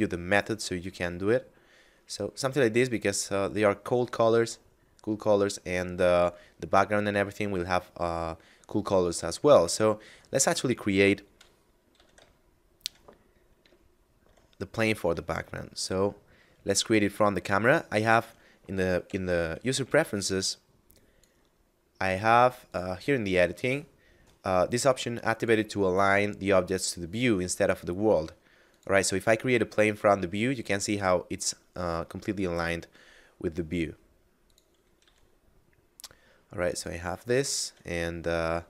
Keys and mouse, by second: 5.1 middle click, 9.1 middle click, 11.2 KP_Divide, 11.9 a, 12.4 middle click, 13.3 KP_0, 14.6 shift+a, 16.7 click, 18.8 ctrl+alt+u, 20.3 click, 22.6 click, 25.3 click, 30.7 s, 34.4 click, 34.9 s, 36.6 click, 38.3 shift+middle click.